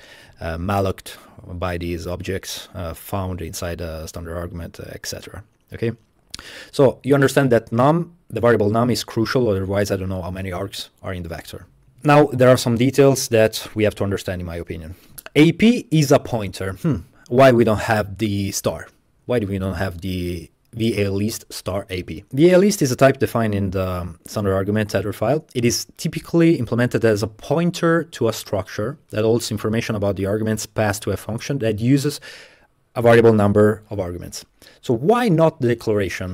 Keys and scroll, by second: 11.9 Tab, 15.1 Right, 22.1 Right.